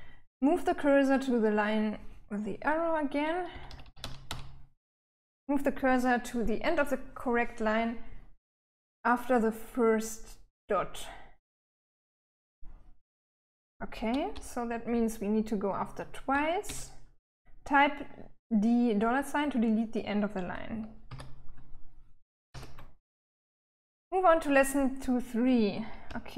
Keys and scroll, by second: 2.9-3.7 typing, 13.7-16.1 typing, 20.5 d, 21.7-22.4 typing, 25.4-26.3 typing.